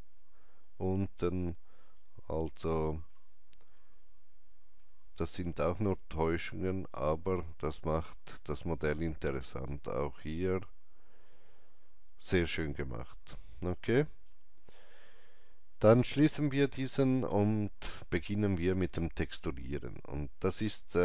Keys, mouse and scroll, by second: 1.2 alt+middle click, 1.2 alt+click, 3.7 alt+middle click, 6.9-19.6 alt+drag, 13.7 alt+right click, 20.4 alt+click, 20.4 alt+right click, 20.5-21.0 alt+drag.